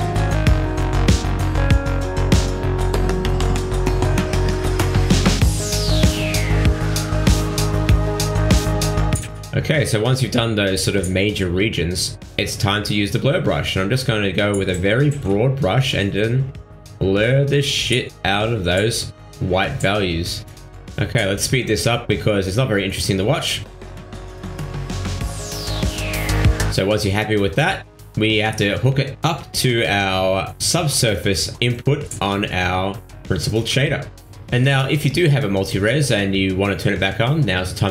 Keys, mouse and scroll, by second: 0.0 shift+middle click, 0.6 click, 1.5 click, 1.8 click, 2.5 middle click, 3.8 ctrl+middle click, 4.0 middle click, 5.3 click, 6.0 middle click, 6.3 shift+middle click, 6.7 middle click, 7.9 click, 8.3 click, 8.7 click, 9.0 middle click, 9.8 middle click, 10.6 click, 11.1 click, 11.3 click, 11.6 click, 11.7 click, 13.1 click, 14.1 f, 14.8 click, 15.7 middle click, 16.3 click, 17.8 middle click, 18.2 middle click, 18.6 shift+middle click, 19.2 ctrl+middle click, 19.4 middle click, 19.8 click, 20.8 click, 21.0 click, 21.0 shift+middle click, 21.2 middle click, 21.2 click, 21.6 middle click, 21.7 shift+middle click, 21.9 shift+middle click, 22.0 shift+middle click, 22.0 click, 22.3 shift+middle click, 22.3 click, 22.4 middle click, 22.5 middle click, 22.6 shift+middle click, 22.7 click, 22.8 ctrl+middle click, 22.9 shift+middle click, 22.9 f, 23.2 click, 23.3 ctrl+middle click, 23.4 middle click, 23.5 click, 23.6 click, 23.9 click, 24.0 click, 24.0 ctrl+middle click, 24.3 shift+middle click, 24.3 click, 24.4 ctrl+middle click, 24.4 f, 24.5 click, 24.7 shift+middle click, 24.8 click, 24.9 middle click, 25.0 shift+middle click, 25.1 shift+middle click, 25.1 ctrl+middle click, 25.3 click, 25.4 click, 25.5 click, 25.6 ctrl+z, 25.6 f, 25.8 click, 25.9 click, 26.1 ctrl+z, 26.1 f, 26.2 click, 26.4 click, 26.6 click, 26.6 click, 26.8 ctrl+middle click, 27.0 shift+middle click, 27.2 shift+middle click, 27.3 ctrl+middle click, 27.6 click, 28.0-28.6 scroll down 5, 28.0 middle click, 28.2 click, 30.6 click, 32.4 scroll up 4, 35.0 click, 35.8 click.